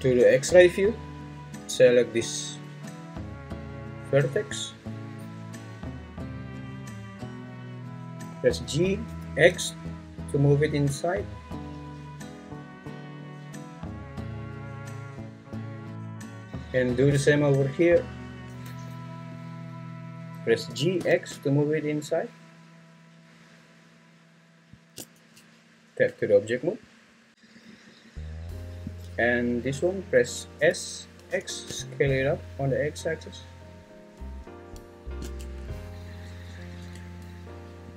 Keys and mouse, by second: 3.7 click, 4.0-5.3 drag, 5.7 click, 5.9 click, 8.5 g, 9.1 x, 16.3 shift+middle click, 18.2 right click, 19.3 click, 19.6 click, 20.7 g, 21.0 x, 24.8 shift+click, 25.3 Tab, 28.9 click, 30.6 s, 31.3 x, 35.1 shift+click, 35.4 Tab, 36.8 Tab.